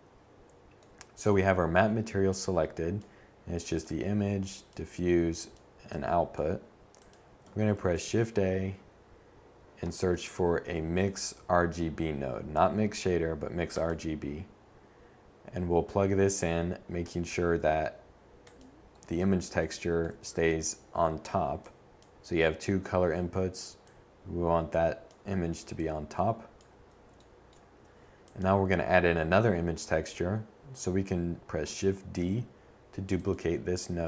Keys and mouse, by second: 5.6 shift+a, 16.4-24.4 drag, 29.4 shift+d, 31.0-32.8 drag.